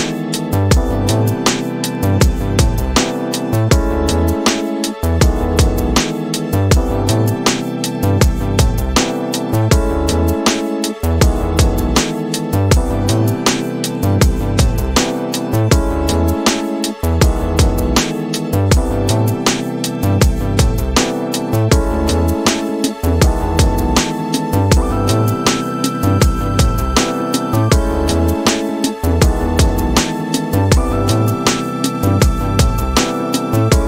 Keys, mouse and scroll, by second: 0.2 scroll down 3, 0.3 middle click, 1.1-1.6 scroll down 9, 2.9 click, 5.1 click, 6.8 g, 16.9 middle click, 18.3 g, 20.9 scroll down 3, 21.2 middle click, 22.4-28.0 drag, 28.4 middle click, 29.1-30.2 scroll up 7, 30.3 click, 31.4 g.